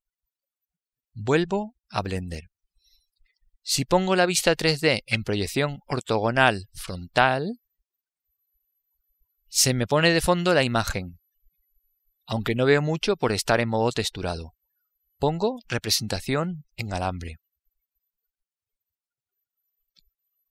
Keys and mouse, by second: 6.7 KP_1, 8.0-12.3 middle drag, 18.9 click.